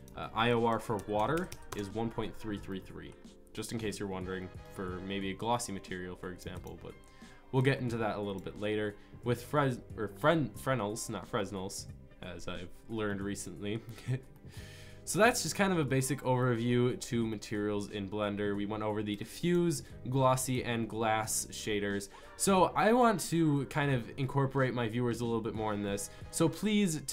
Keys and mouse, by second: 1.7 KP_3, 15.9 click, 25.2-27.1 middle drag.